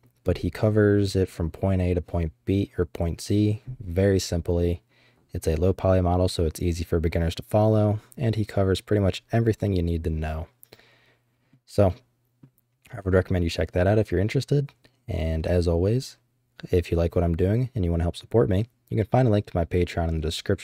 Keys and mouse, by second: 9.6-11.5 middle drag, 11.8 middle click.